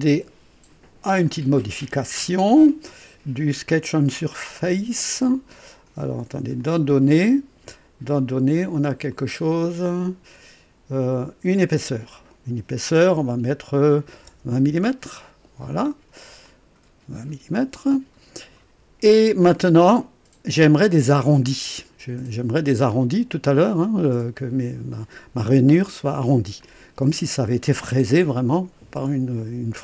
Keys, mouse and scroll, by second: 1.2 click, 6.6 click, 9.1-10.4 drag, 12.0 click, 14.0 KP_2, 14.2 KP_0, 14.6 Return, 16.4-18.7 drag, 19.3 click, 19.9 click, 22.9 click, 26.6 click.